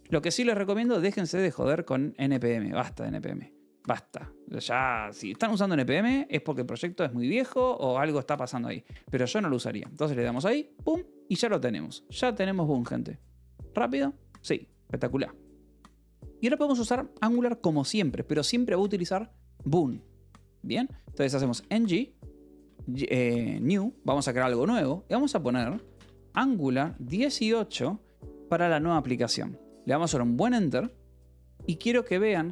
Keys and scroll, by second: 6.4 BackSpace, 7.8 alt+Tab, 8.0-9.9 typing, 10.2 Return, 21.4-23.9 typing, 25.5-27.3 typing, 30.6 Return, 32.3 Up.